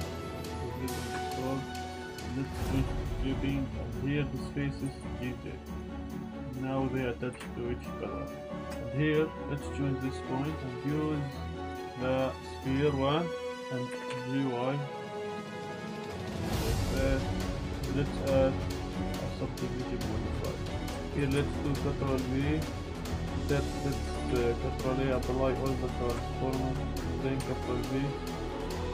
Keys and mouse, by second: 0.4-1.1 middle drag, 1.1 Tab, 1.4 middle click, 2.4 click, 3.4-4.6 middle drag, 4.8 g, 5.0 z, 5.7 click, 5.9 click, 6.9 middle click, 7.3 g, 7.4 z, 7.8 click, 8.3 middle click, 8.7 Tab, 9.0 click, 9.4 middle click, 9.4 1, 11.4 click, 11.6-12.6 drag, 14.1 y, 16.3 click, 16.3 Tab, 16.5 z, 16.7-17.0 drag, 17.2 drag, 18.7 click, 19.4-20.1 drag, 20.5 drag, 20.9 Tab, 21.3 ctrl+b, 22.7 click, 23.0 ctrl+z, 23.2 Tab, 24.2 ctrl+a, 26.1 Tab, 27.4 ctrl+b.